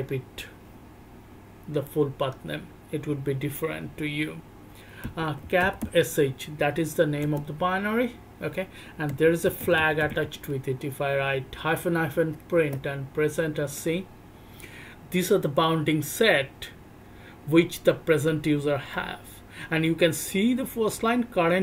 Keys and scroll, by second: 5.0-10.0 typing, 12.5 Return.